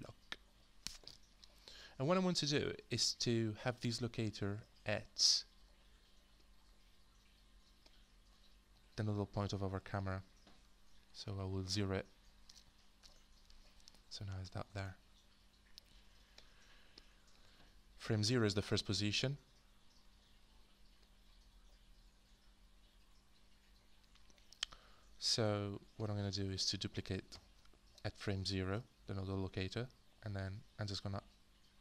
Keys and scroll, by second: 0.0-0.6 typing, 13.0 0, 13.2 Return, 27.3 ctrl+d.